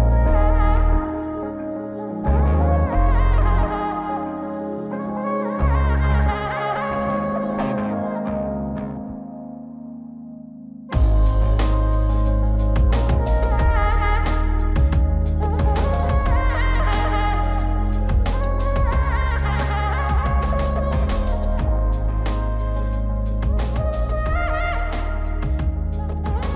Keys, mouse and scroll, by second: 1.0 middle click, 1.7-2.8 drag, 3.1 scroll up 3, 4.2 click, 7.8-8.3 scroll down 3, 8.6-9.3 scroll up 2, 9.3-9.6 scroll up 1, 9.6 scroll down 3, 10.0 middle click, 10.6 middle click, 11.6 click, 12.4 click, 13.6 middle click, 14.8-15.9 drag, 17.9-18.8 drag, 20.2 click, 21.9-26.5 drag.